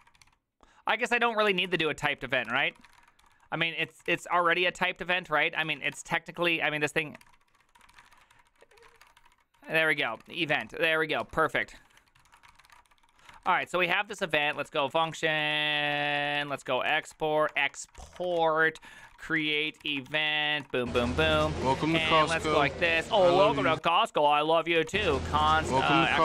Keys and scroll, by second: 0.0-23.2 typing, 9.7 ctrl+d, 23.2 ctrl+u, 23.4 ctrl+u, 23.8 ctrl+u, 24.6-26.2 typing.